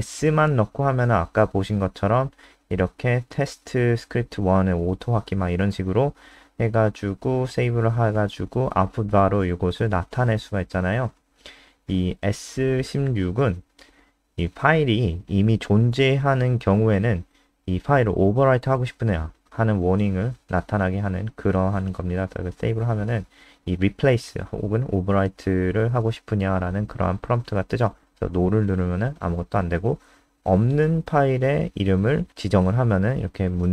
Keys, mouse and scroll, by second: 0.5-2.5 typing, 3.6 Down, 5.2 click, 5.9 click, 6.6 click, 17.5-19.1 typing, 19.9 click, 26.6 End, 27.0 ctrl+Left, 27.3 Right, 27.6 Left, 31.3 Return.